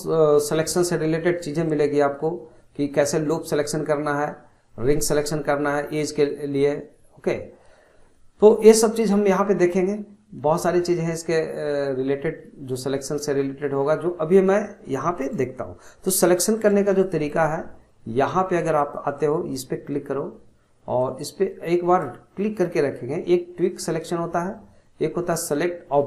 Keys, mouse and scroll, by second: 14.3-15.8 middle drag, 15.8-16.3 scroll up 1, 16.3-18.8 shift+middle drag, 18.8-24.2 drag.